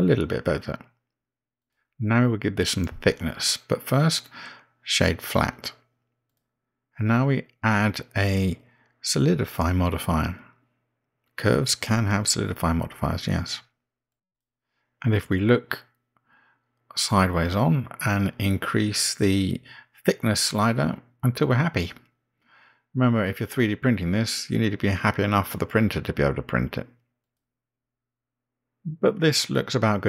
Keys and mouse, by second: 2.6 middle click, 5.0-7.3 right drag, 8.8 click, 10.6-15.4 drag, 18.3-19.7 middle drag, 21.1-30.0 drag.